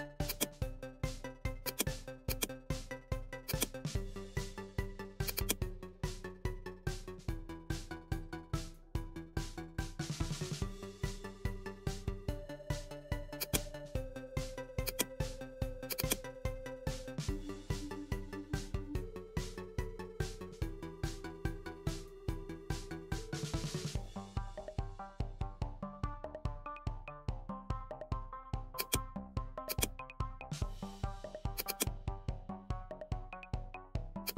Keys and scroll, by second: 7.4 typing, 9.5 typing, 10.3 Return, 11.0-11.4 typing, 16.7 shift+j, 18.5-18.9 typing, 19.6 Return, 21.4 shift+g, 22.4-23.2 typing, 25.4 typing, 27.2 typing.